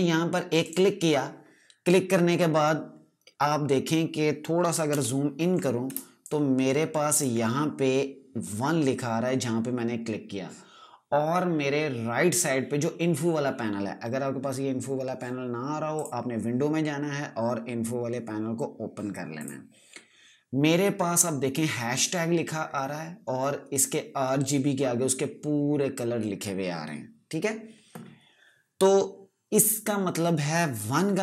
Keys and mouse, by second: 0.5 click, 4.6 ctrl+Num_Lock, 4.8 ctrl+KP_Add, 5.8 space, 6.1 click, 6.3 space, 15.8 space, 16.0 click, 21.6 click.